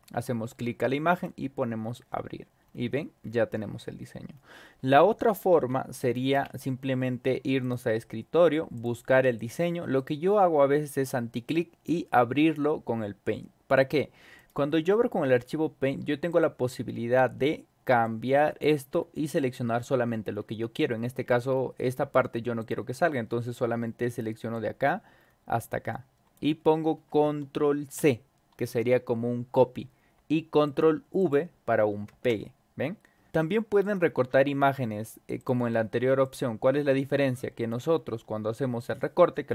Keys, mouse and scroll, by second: 1.1 click, 2.6-2.9 scroll up 2, 3.2 scroll down 2, 3.5 scroll up 2, 3.9 scroll down 2, 4.3 scroll up 2, 5.5 Delete, 6.0 click, 6.3 0, 7.6 click, 8.7 click, 9.3 click, 9.9 right click, 14.3 click, 16.3 click, 18.0-21.3 drag, 21.5 scroll down 2, 22.6 click, 24.5-26.3 drag, 27.9 ctrl+v, 30.6 click, 31.2 click, 32.0 ctrl+v, 33.2 click, 33.8 click, 35.4 click, 36.2 click, 37.0 scroll down 2, 37.3-37.7 drag, 37.9 scroll down 2.